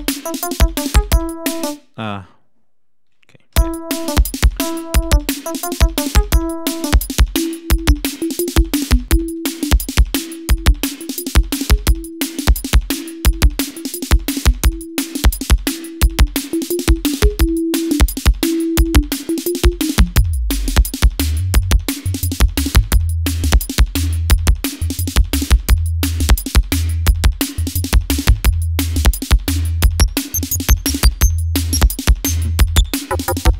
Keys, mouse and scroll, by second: 1.6 space, 3.5 l, 4.4 click, 6.1 click, 7.1 click, 7.9 click, 9.1 click, 9.9 click, 11.0 click, 11.6 click, 12.5 click, 13.3 click, 13.7 click, 14.3 click, 15.1 click, 15.4 click, 16.3 click, 19.5-20.5 drag, 22.7-23.8 drag, 25.0-26.3 drag, 26.4 click, 27.1 click, 28.2 click, 29.4-31.1 drag, 32.5 click.